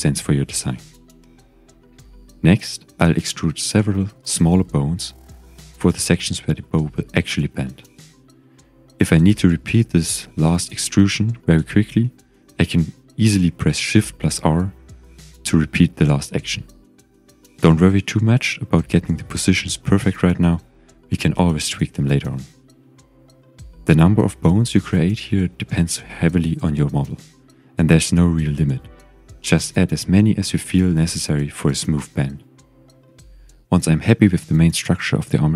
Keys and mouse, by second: 0.0 KP_1, 1.4-2.6 shift+middle drag, 3.5 e, 5.1 click, 5.7-7.3 typing, 9.0 click, 9.7 g, 10.3 click, 10.9 click, 11.2 g, 11.9 click, 12.4 click, 12.7 g, 13.8 click, 14.4 click, 14.6 g, 15.7 click, 16.2 click, 16.7 g, 17.7 click, 18.3 click, 18.7 g, 19.5 click, 20.2 click, 20.4 g, 23.4 g, 24.0 click, 24.7 click, 25.0 g, 26.4 g, 26.9 click, 27.3 click, 28.0 Delete, 30.1 click, 30.9 click, 31.8 g, 32.7 click, 33.5 click, 33.7 g, 35.1 click.